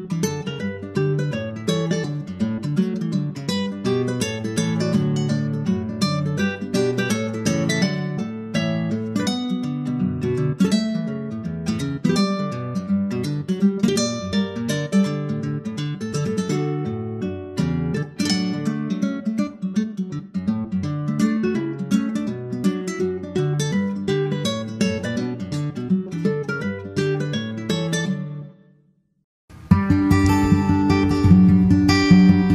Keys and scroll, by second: 0.6 super+Tab, 3.0 super+c, 3.1 super+Tab, 3.6 super+v, 9.8 super+z, 10.3 super+Left, 10.5 shift+super+Right, 10.6 super+c, 10.9 super+v, 11.1 super+v, 11.3 super+v, 30.0 super+Right.